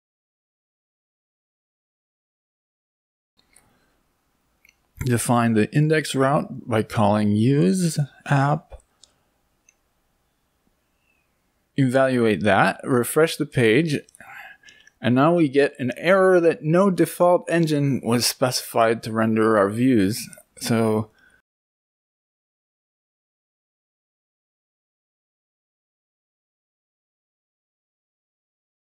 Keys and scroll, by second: 8.0 Right, 10.0 Down, 10.2 Down, 11.1 Return.